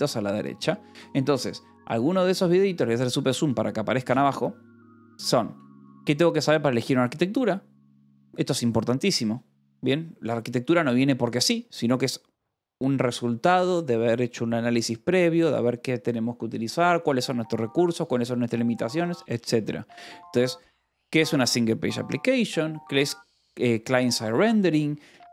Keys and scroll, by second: 2.3 ctrl+=.